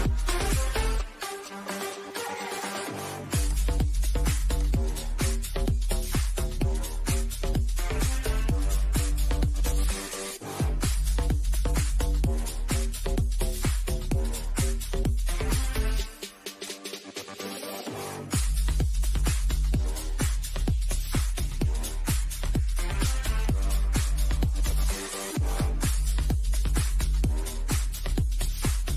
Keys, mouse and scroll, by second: 2.4 click, 4.3 shift+middle click, 5.0 scroll down 1, 5.9-8.8 shift+middle drag, 9.9-12.7 middle drag, 14.7 click, 16.8 scroll up 1, 17.6-19.4 drag, 19.9 scroll down 1, 22.4 click, 23.7 scroll down 1, 24.1 click, 24.8 shift+middle click, 25.7 scroll down 1, 26.5-27.9 shift+middle drag, 27.9-28.4 scroll down 1, 28.4 middle click.